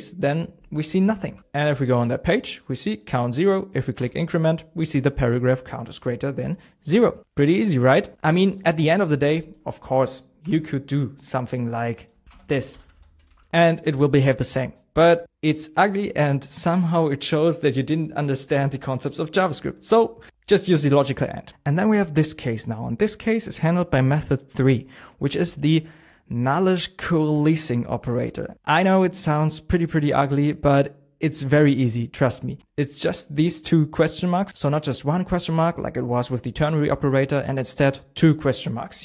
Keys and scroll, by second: 1.0 super+s, 1.4 super+Tab, 10.4 shift+?, 13.2 shift+;, 13.3 super+s.